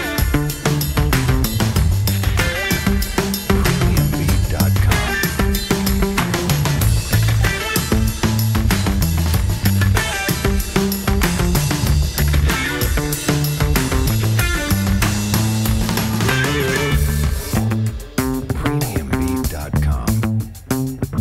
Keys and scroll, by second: 7.4 Delete, 8.1 3, 12.0 r, 16.0 w, 17.3 r, 18.7 w.